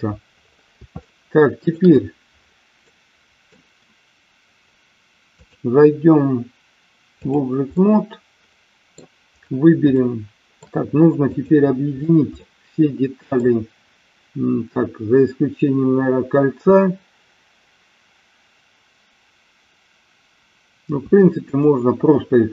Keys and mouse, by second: 1.0 shift+middle click, 2.8 middle click, 5.3-7.3 drag, 7.7-9.0 middle drag, 9.8-10.7 shift+middle drag, 11.2 click, 12.3-13.3 middle drag, 21.3 shift+click.